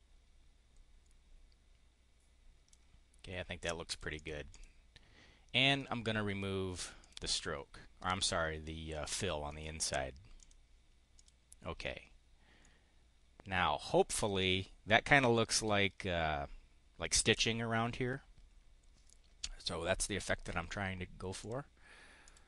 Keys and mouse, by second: 3.8 click, 4.1 click, 4.5 click, 7.0 click, 9.4 right click, 10.3 click, 11.1 click, 12.5-13.8 drag, 21.3 click, 22.2 click.